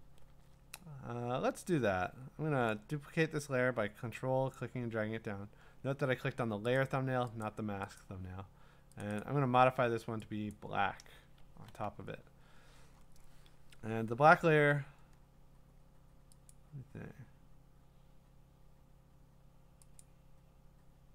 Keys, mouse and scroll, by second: 4.5 click, 6.8 click, 7.4 click, 8.0 click, 9.0 click, 9.2 click, 10.5 click, 11.2 Return, 12.2-12.8 scroll up 5, 12.8 scroll down 2, 12.9-13.5 scroll down 3, 15.4-15.8 scroll up 2, 16.5 click, 16.5 scroll up 3, 19.4 click, 20.6-21.1 drag.